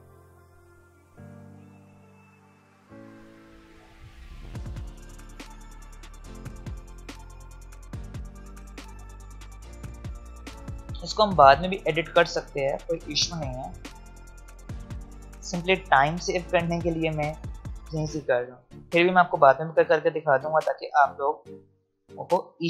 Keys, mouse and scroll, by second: 2.4 alt+scroll up 1, 3.4 alt+scroll up 1, 5.3-9.3 drag, 9.3 alt+scroll down 1, 10.6 alt+scroll up 1, 13.0-14.7 drag, 15.1 click, 16.2-16.5 alt+scroll up 2, 17.3-21.6 drag, 20.6 click.